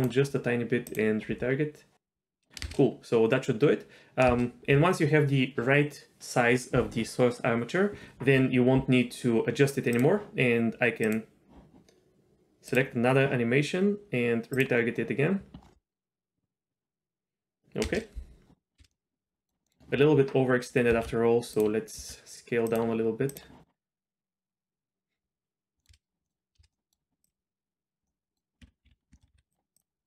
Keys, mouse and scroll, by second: 0.9-2.3 drag, 2.6 space, 4.3 space, 9.9 click, 11.0 click, 14.6-17.4 drag, 17.9 space, 18.8 space, 18.9-19.5 middle drag, 19.5 scroll up 2, 19.6 middle click, 21.0 ctrl+z, 21.5 click, 22.0 s, 23.3-25.6 drag, 25.8 middle click, 26.2 middle click, 26.2 space, 26.6 space, 26.7-27.2 middle drag, 27.2 click, 28.1 middle drag, 28.8 ctrl+z, 29.0 ctrl+z, 29.2 shift+middle click, 29.3 s, 29.7 click.